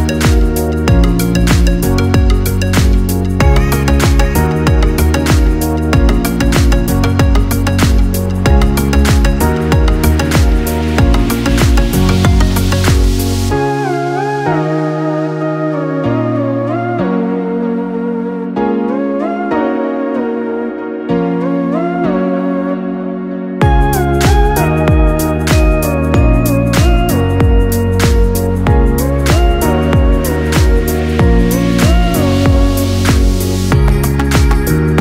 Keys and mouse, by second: 0.5 a, 2.9 shift+d, 12.0 ctrl+z, 14.1 g, 17.2 shift+d, 24.8 r, 30.0-32.8 middle drag, 32.8-34.5 ctrl+KP_8, 34.7 ctrl+KP_8, 34.8 ctrl+KP_8.